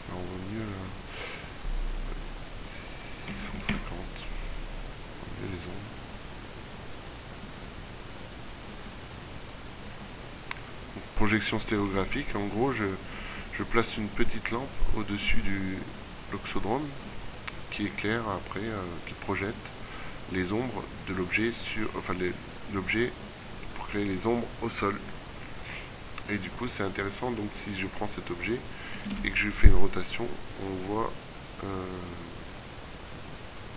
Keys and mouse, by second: 15.2 middle click, 16.8 middle click, 27.1-29.0 right drag, 29.1 r.